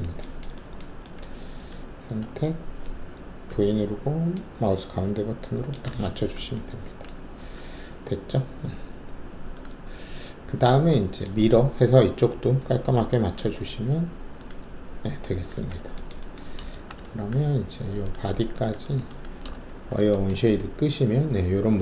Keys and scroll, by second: 3.4-4.5 typing, 7.4 alt+`, 13.3 ctrl+e, 15.5 w, 16.7 alt+shift+q, 19.7 alt+shift+w.